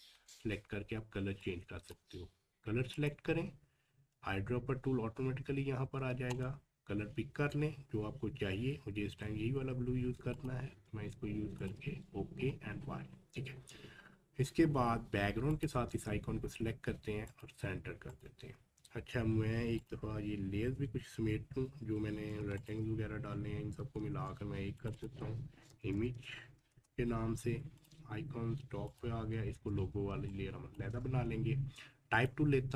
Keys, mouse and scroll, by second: 1.4-2.9 drag, 6.3 click, 6.3 click, 10.3 click, 12.3 scroll down 1, 13.2 scroll up 1, 14.6-15.2 scroll down 1, 15.5 ctrl+click, 20.0-21.3 scroll up 1, 22.6 shift+click, 24.0 ctrl+g, 24.8 click, 25.4-26.4 typing, 26.7 Return, 27.8 click, 29.4-29.7 scroll up 1, 30.1 space, 30.3 click, 30.6 space, 32.1 click.